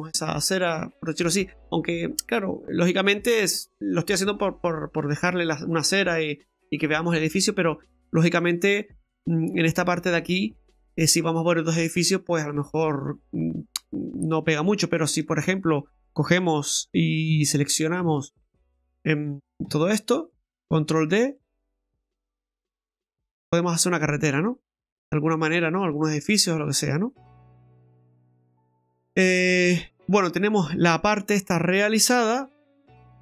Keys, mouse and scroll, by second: 2.0 middle click, 5.1 scroll down 1, 5.1 middle click, 7.8 middle click, 7.8 scroll down 2, 8.2 middle click, 13.8-14.2 scroll up 2, 14.2 middle click, 14.8 shift+middle click, 17.3 Tab, 18.3 shift+right click, 19.7 a, 20.0-20.7 scroll down 3, 21.0 shift+d, 22.3 click, 23.8 middle click, 26.1 middle click, 27.5 ctrl+z, 28.0 scroll up 2, 28.3 middle click, 28.7 right click, 28.9 middle click, 29.5-29.9 scroll up 5, 30.0 middle click, 32.4 scroll down 1, 32.7 middle click.